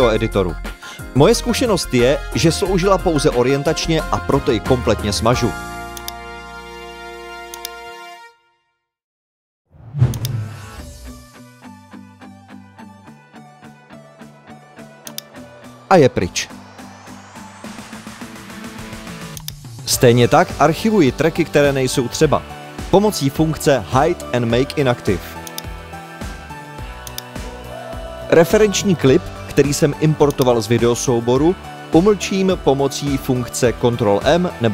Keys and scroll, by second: 31.7 super+m.